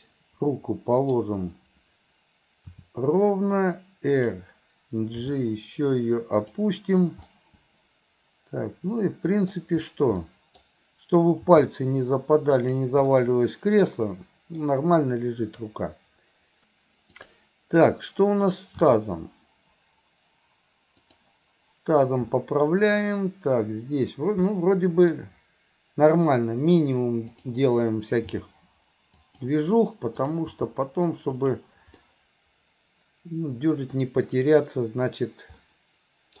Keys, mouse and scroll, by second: 1.2 scroll down 1, 2.7 r, 5.2 g, 7.4-9.6 middle drag, 9.6-10.2 scroll down 1, 10.2 scroll up 1, 10.3 middle click, 11.5 g, 13.1-14.6 middle drag, 17.2 click, 18.9 r, 22.4-23.1 middle drag, 24.6-25.2 middle drag, 27.3 click, 28.3 g, 30.2 click, 30.6 g, 32.1-34.0 middle drag, 34.0 scroll down 1, 35.7 scroll up 1, 35.8-36.4 middle drag.